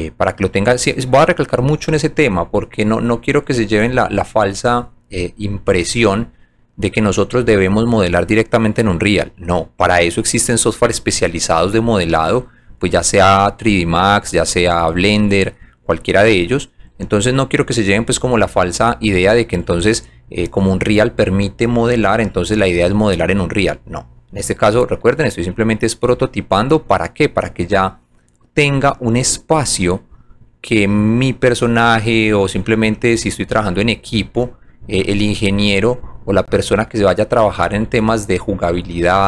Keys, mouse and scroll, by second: 1.9 alt+click, 2.6 alt+right click, 3.8 alt+click, 4.2 alt+click, 4.8 alt+middle click, 5.3 alt+middle click, 6.0 alt+click, 6.9 alt+middle click, 7.9 alt+right click, 8.7-9.9 alt+drag, 11.0 alt+click, 12.0 alt+middle click, 12.7 alt+right click, 13.2 alt+click, 13.6 alt+middle click, 14.3 alt+right click, 15.1 alt+middle click, 15.7 alt+right click, 16.3 alt+click, 17.1 alt+middle click, 19.0 alt+click, 25.1 alt+click, 27.7 click, 28.8 click, 30.9 click, 32.8 alt+click, 34.4 alt+right click, 35.0 alt+middle click, 35.7 alt+right click, 36.2 alt+click, 36.7 alt+right click, 37.6 alt+click, 38.0 alt+middle click.